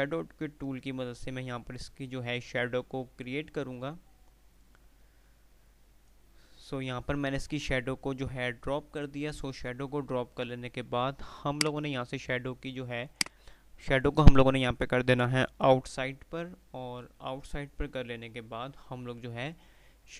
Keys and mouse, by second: 11.6 click, 14.5 typing.